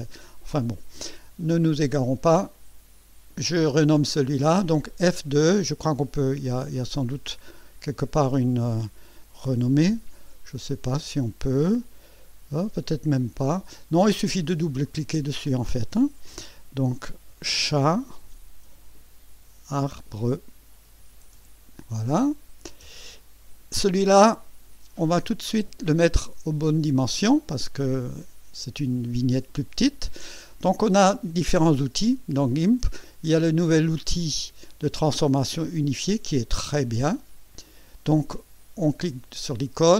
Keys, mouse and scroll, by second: 5.1 right click, 13.6 click, 14.6 click, 17.1-21.8 typing, 22.8 Return, 37.6 click.